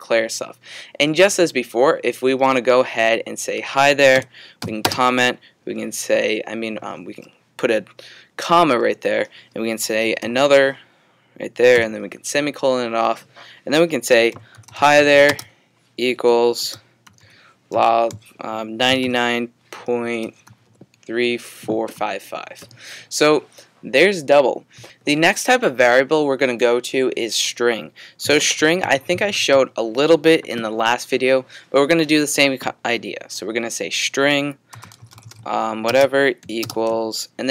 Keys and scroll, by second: 4.6 typing, 9.6-12.5 typing, 13.9-17.2 typing, 18.6-23.1 typing, 28.0-29.8 typing, 34.5-35.8 typing.